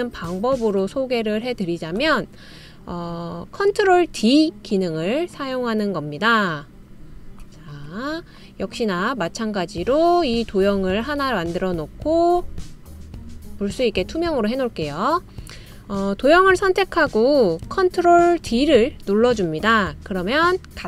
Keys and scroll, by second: 19.1 super+d.